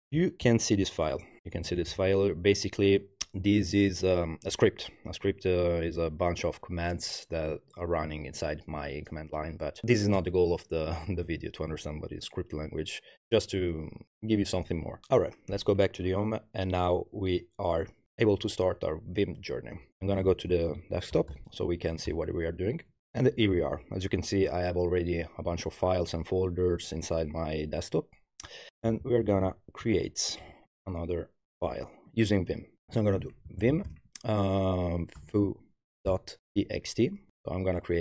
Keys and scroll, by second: 0.0-0.3 typing, 0.4 super+-, 19.8-21.6 typing, 21.8 Tab, 22.1 Return, 23.0 ctrl+l, 28.7 super+-, 30.0 ctrl+alt+Left, 33.2-37.3 typing.